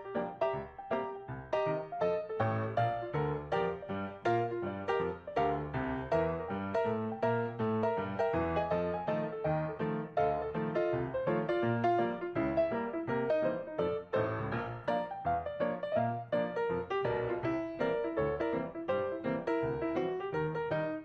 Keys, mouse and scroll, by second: 15.3 scroll down 3.